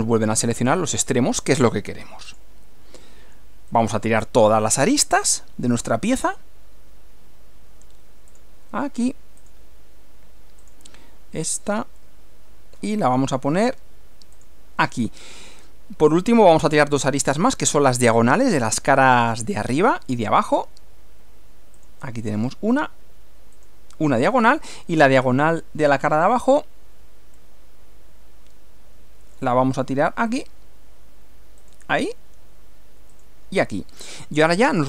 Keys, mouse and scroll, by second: 2.3 click, 3.8 click, 6.2 click, 8.3 click, 9.4 click, 10.6 click, 12.0-13.0 middle drag, 14.4 click, 15.0-16.6 middle drag, 16.7 middle click, 17.6 middle click, 20.2 click, 21.8 click, 23.6 click, 27.4-29.6 middle drag, 30.3 click, 31.6 click, 33.1 click, 34.0-34.8 middle drag.